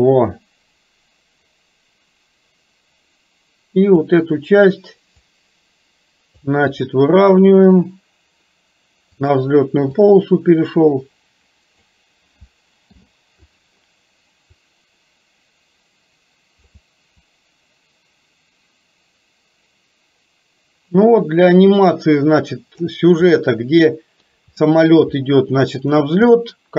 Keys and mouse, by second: 5.4 click, 7.4 r, 10.1-12.0 drag, 12.8 i, 14.7-16.8 drag, 17.5-23.0 drag, 23.5 middle click, 24.1 middle click, 24.7 middle click, 26.4 middle click.